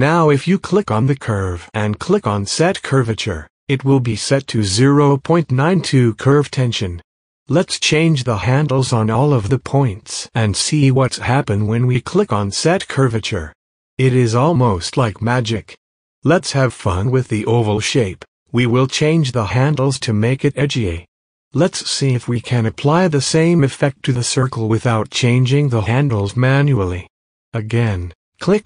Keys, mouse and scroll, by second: 1.8 click, 2.4 space, 2.5 click, 2.7 space, 2.8 space, 5.1 click, 6.3-11.8 drag, 12.0 space, 12.4 click, 12.6 space, 13.0 click, 14.3 click, 15.5 click, 16.8 space, 17.8 click, 18.0 space, 18.9 space, 19.8-28.6 drag.